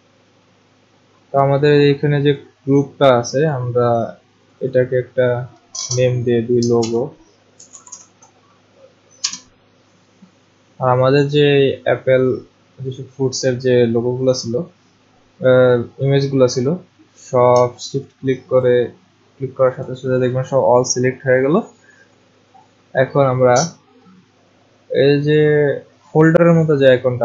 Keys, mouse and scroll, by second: 2.4 click, 3.5 click, 4.7 click, 6.8-8.4 typing, 9.2 Return, 11.6 click, 17.5 click, 18.6 shift+click.